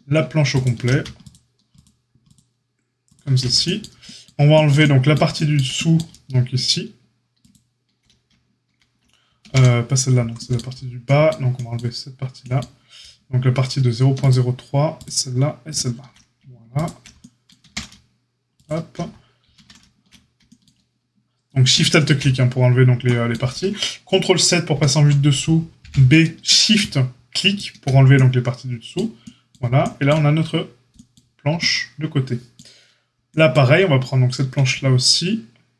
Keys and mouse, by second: 0.5 alt+shift+click, 1.1 alt+shift+click, 7.3 alt+shift+click, 9.4 ctrl+z, 14.1 alt+shift+click, 14.2-21.7 alt+shift+middle drag, 17.6 ctrl+z, 19.5 ctrl+z, 21.7 alt+shift+click, 21.7-35.7 alt+shift+middle drag, 24.7 ctrl+KP_7, 25.8 b.